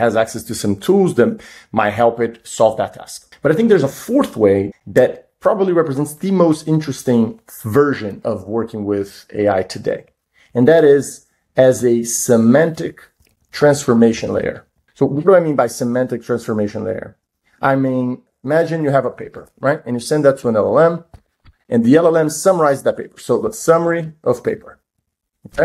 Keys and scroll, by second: 10.1 super+Down, 19.5 super+Right, 20.9 shift+l, 21.5 super+Right.